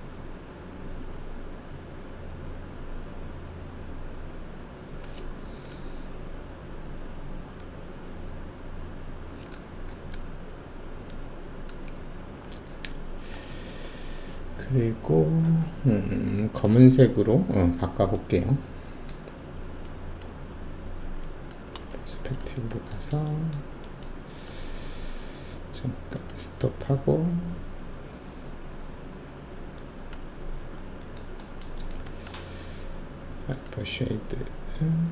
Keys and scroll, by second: 9.9 w, 21.9 alt+shift+q.